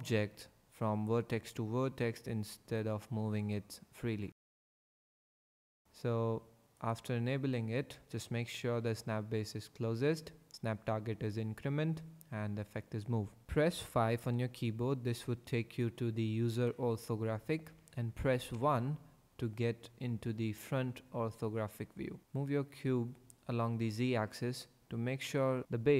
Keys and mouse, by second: 3.4 click, 4.3 g, 6.9-12.6 drag, 14.5 KP_5, 18.5 KP_1, 22.2 g.